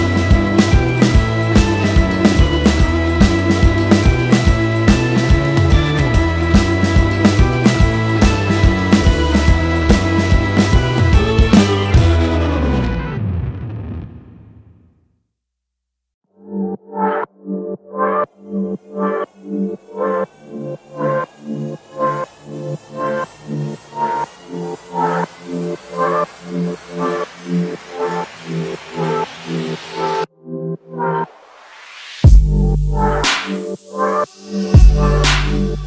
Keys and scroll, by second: 0.8 Delete, 5.4 ctrl+z, 15.8 Delete, 22.4 m, 26.8 /, 27.5 5, 27.7 Return, 30.5 space, 32.1 Delete, 34.8 space, 34.9 Escape.